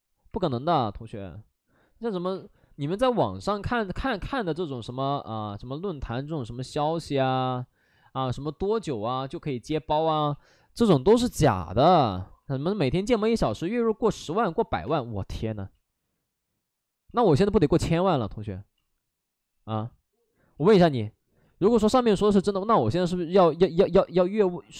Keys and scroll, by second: 0.2 5, 2.3 space, 3.3 ctrl+z, 13.4 space, 14.4 ctrl+z, 14.8 space, 15.7 ctrl+z, 17.1 ctrl+z, 18.8 ctrl+z, 19.7 ctrl+z, 20.5 ctrl+z, 22.8 space, 23.4 space.